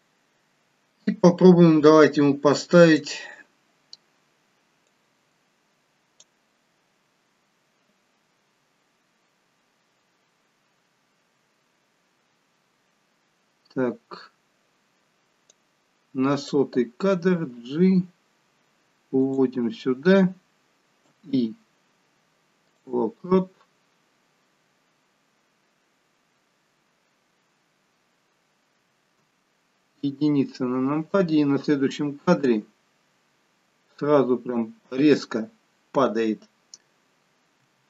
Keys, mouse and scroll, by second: 1.1 click, 5.0 click, 15.5 click, 17.3 g, 21.1 i, 29.2 KP_7, 30.0 KP_1, 32.4 click, 37.7 r.